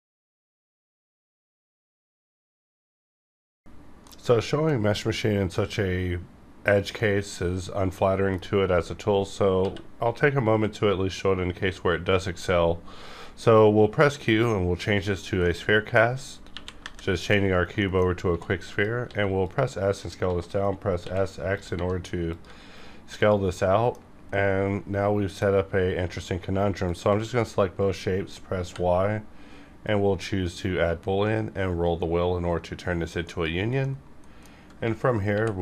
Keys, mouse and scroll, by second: 7.0-8.7 middle drag, 8.7-9.3 scroll up 1, 9.3 scroll down 1, 9.6 q, 10.6-14.9 drag, 14.9 scroll up 1, 15.4 middle click, 16.4 KP_1, 16.8 KP_5, 17.8 shift+middle click, 18.3 shift+d, 18.7 click, 19.0 s, 19.4 click, 20.2 s, 20.9 x, 21.5 click, 21.7 r, 22.3 click, 22.4 g, 23.1 click, 23.2 click, 23.5 middle click, 24.0 scroll up 1, 24.2 middle click, 25.5 scroll up 1, 26.8 shift+click, 29.8-31.3 drag, 31.3 scroll up 1, 32.0 scroll up 1, 33.3 click, 33.8-35.2 middle drag, 35.2 y.